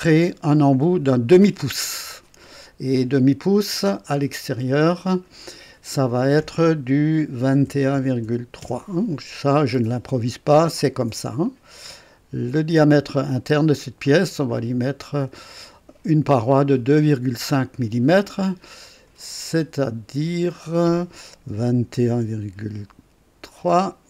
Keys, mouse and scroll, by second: 4.0 click, 5.1 click, 7.4 KP_2, 7.6 KP_1, 7.9 KP_Decimal, 8.2 KP_3, 8.6 KP_Enter, 8.6 Return, 9.6 typing, 11.4-13.4 drag, 13.0-13.8 typing, 15.0 click, 19.8 click, 21.5-22.2 typing, 23.6 KP_3.